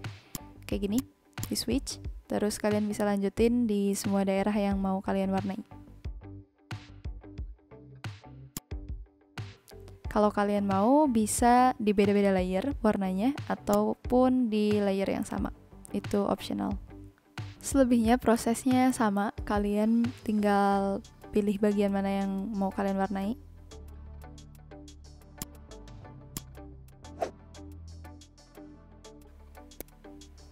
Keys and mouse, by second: 0.3 click, 4.0 n, 6.9 click, 8.5 click, 13.6 click, 25.3 click, 26.8 ctrl+z, 29.6 v, 29.7 click.